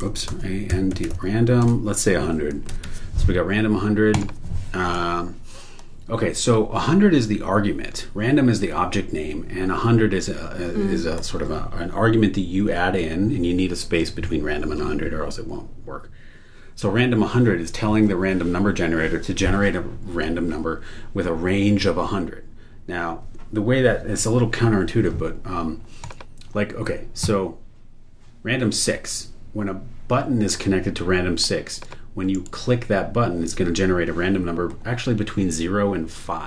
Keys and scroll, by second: 0.0-3.2 typing, 32.3 super+e.